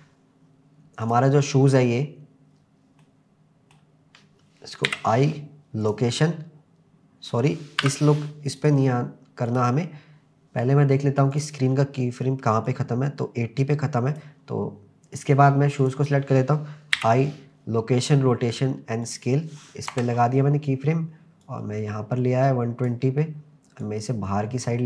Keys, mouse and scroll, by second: 1.0 click, 3.0-4.1 middle drag, 4.9 i, 6.0 m, 7.8 Delete, 8.6 click, 9.5 click, 11.3 click, 12.7-14.3 drag, 15.8 click, 16.9 i, 19.9 KP_0, 21.4-22.9 drag, 23.8 click.